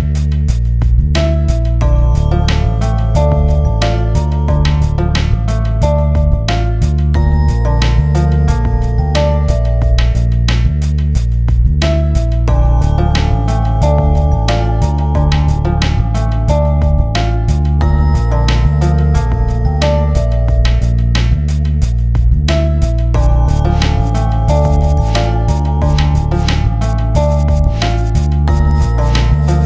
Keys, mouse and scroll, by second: 0.2 ctrl+space, 0.3 click, 0.4 ctrl+z, 0.8 click, 1.1 ctrl+space, 1.3 scroll down 1, 1.4 click, 1.5 scroll up 1, 1.6 click, 1.9 ctrl+z, 2.0 ctrl+space, 2.2 click, 2.4 ctrl+space, 2.4 click, 2.8 click, 3.0 ctrl+space, 3.3 right click, 3.4 shift+F2, 3.9 alt+click, 4.1 click, 4.4 ctrl+z, 4.5 space, 4.6 click, 4.8 ctrl+z, 4.8 space, 4.9 click, 5.0 ctrl+z, 5.1 click, 5.5 ctrl+space, 5.6 click, 5.9 ctrl+z, 6.2 click, 6.2 F4, 6.4 ctrl+s, 6.5 alt+click, 7.3 ctrl+click, 8.0 shift+F2, 8.2 scroll down 1, 8.4 click, 9.0 click, 11.8 click, 12.4 click, 12.7 click, 13.2 click, 14.6 scroll down 1, 15.0 click, 15.8 click, 16.6 click, 17.3 click, 17.5 scroll down 1, 17.8 scroll up 1, 17.9-18.9 typing, 17.9 click, 19.0 click, 19.4 scroll down 1, 19.9 scroll up 1, 20.2 scroll down 1, 20.9 click, 21.3 scroll down 1, 21.6 scroll up 1, 21.9 scroll down 1, 22.0 click, 22.2 space, 22.6 Return, 22.9 click, 23.0 scroll down 1, 23.5 Return, 24.0 scroll down 1, 24.1-24.4 scroll up 1, 24.6 scroll down 1, 25.2 click, 25.4 scroll down 1, 25.7 click, 26.0-26.8 scroll down 1, 26.8 click, 27.3 Return, 27.6 ctrl+v, 28.6 click, 29.0 shift+F4, 29.2 click.